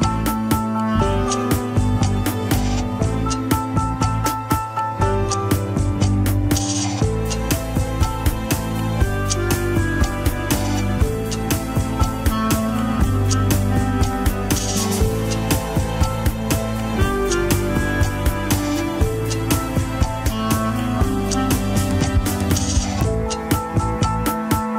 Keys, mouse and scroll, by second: 0.2 click, 1.5 h, 1.9-2.2 drag, 2.5-4.2 middle drag, 4.2 shift+click, 5.5 ctrl+shift+c, 8.6-12.0 middle drag, 12.0-12.4 drag, 12.7 middle click, 13.5-14.0 shift+drag, 14.9 ctrl+shift+c, 16.0 KP_1, 16.3 scroll down 4, 16.5 alt+z, 17.9 click, 20.0 shift+click, 20.3 scroll up 1, 21.5 alt+z, 21.9 alt+z, 22.3 scroll down 2, 22.9 g.